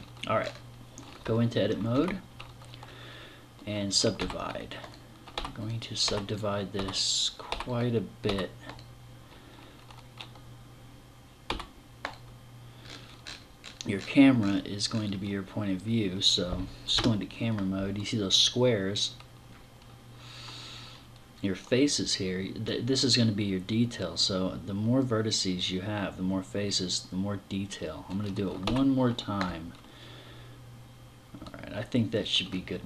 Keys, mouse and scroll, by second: 0.2 scroll up 5, 1.7 Tab, 2.4 scroll down 5, 3.9 w, 5.1-8.0 typing, 11.2 w, 12.6-15.3 scroll up 23, 15.3-15.7 scroll down 4, 16.7 KP_0, 28.4 w, 31.4-32.4 scroll down 1.